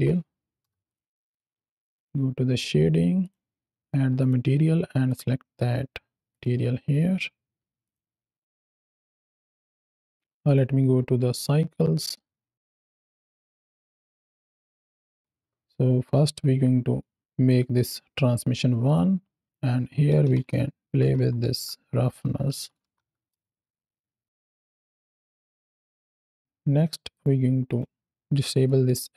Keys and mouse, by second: 0.8 click, 1.2 click, 1.8 click, 3.1 click, 4.1 click, 5.1-6.3 drag, 7.7-8.6 drag, 8.6 KP_7, 9.2 z, 9.5 z, 10.3-11.5 drag, 13.0-13.6 drag, 14.3-15.2 drag, 15.2 KP_0, 15.9 click, 16.9 click, 18.7 click, 19.4-23.2 drag, 24.2 middle click, 24.6 click, 25.4 middle drag, 26.0 KP_7, 27.0-27.7 drag, 28.3 middle click.